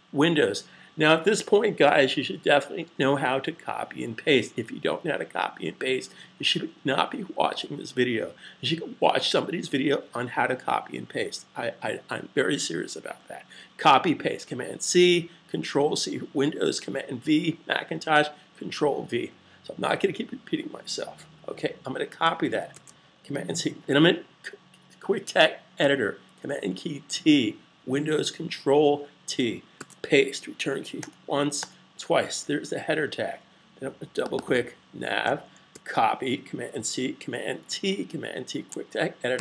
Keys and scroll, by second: 22.6 super+c, 26.9 super+t, 29.7 super+v, 35.4 super+c, 37.4 super+t, 39.1 super+v.